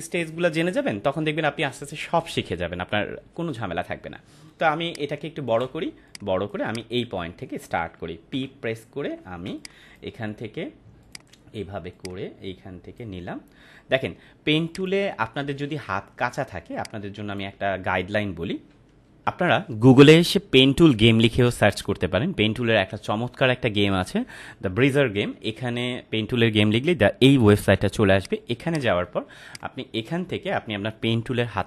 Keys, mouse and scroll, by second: 4.5 space, 4.8-5.5 ctrl+click, 5.8 space, 6.0 click, 6.3-6.9 space, 6.6 click, 6.7 space, 8.3 p, 9.0 ctrl+=, 9.5 space, 9.5-10.2 click, 9.9 space, 11.0 click, 11.0-13.1 drag, 15.7 ctrl+z, 16.7-17.6 drag, 19.2 ctrl+m, 28.1 right click, 28.6 click.